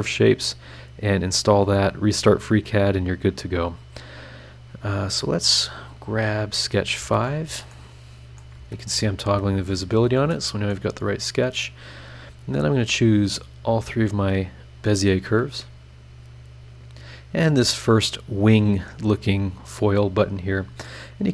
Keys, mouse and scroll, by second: 0.0-0.4 scroll down 1, 2.6 click, 4.9 scroll up 1, 6.6 click, 6.9 space, 7.7 middle click, 7.8 click, 7.8 right click, 8.5 space, 10.7 middle click, 10.8 click, 10.8 right click, 13.6 ctrl+click, 14.2 ctrl+click, 14.8 ctrl+click, 16.0 middle click, 19.1 click, 20.2 scroll down 1, 20.8-21.3 middle drag, 20.9-21.3 drag, 20.9 right click.